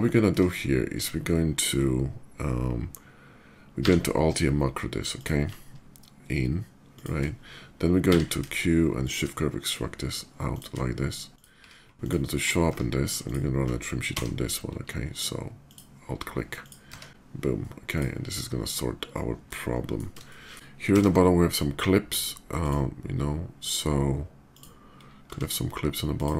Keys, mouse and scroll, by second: 1.6 middle click, 3.9 q, 4.9 alt+click, 6.7 shift+click, 8.0 q, 8.8 click, 10.3 shift+click, 11.0 shift+click, 11.3 q, 11.8 click, 12.4 Tab, 13.0 click, 13.8 d, 13.9 Tab, 15.4 alt+click, 16.4 click, 16.6 Tab, 17.6 click, 18.8 right click, 19.2-19.7 middle drag, 20.0 shift+middle click, 20.7 d, 22.4 click, 24.2 click, 25.1 s, 25.9 click, 25.9 s.